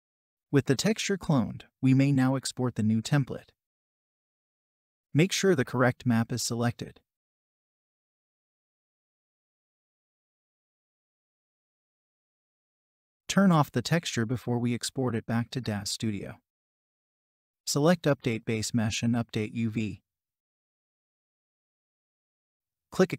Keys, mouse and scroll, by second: 9.7-10.9 typing.